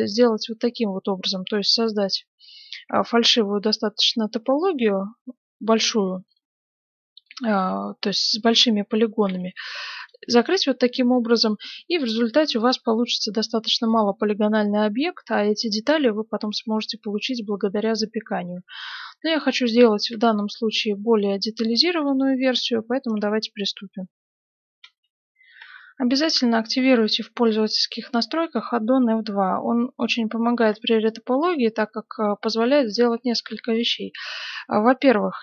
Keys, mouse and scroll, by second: 1.5-6.5 middle drag, 2.8 e, 5.5 right click, 7.2-9.0 middle drag, 9.2 f, 10.0 right click, 10.2 f, 10.5-12.3 middle drag, 14.0-15.9 middle drag, 18.1 ctrl+z, 18.4 ctrl+z, 18.7 ctrl+z, 19.0 ctrl+z, 19.3 ctrl+z, 19.7 ctrl+z, 20.3-22.1 middle drag, 22.9-24.7 middle drag, 24.8 F9, 27.0-28.7 middle drag, 31.0-34.1 middle drag, 33.7 right click, 34.4-35.4 middle drag.